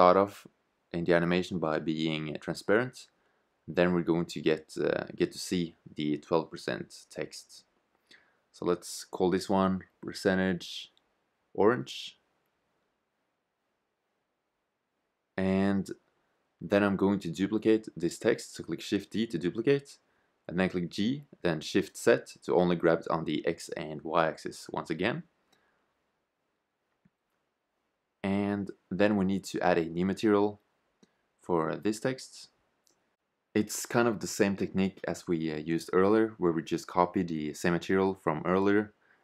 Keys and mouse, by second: 2.6-4.4 middle drag, 19.0 shift+d, 37.0-39.0 drag.